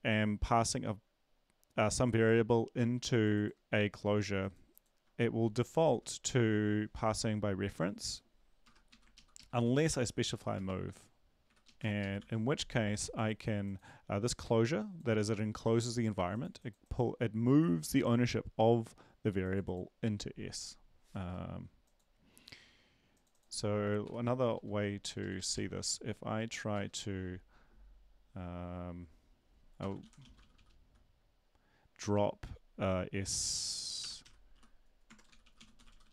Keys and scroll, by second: 8.8-10.5 typing, 8.9 Up, 9.1 ctrl+Left, 9.4 ctrl+Left, 10.9 Left, 11.4 Delete, 11.6 Left, 11.8 space, 12.0 Right, 12.2 ctrl+s, 24.0 Delete, 24.2 Delete, 24.5 Down, 24.9 Down, 25.2 Down, 26.7 Return, 29.8 Return, 30.0-31.0 typing, 34.2-36.1 typing.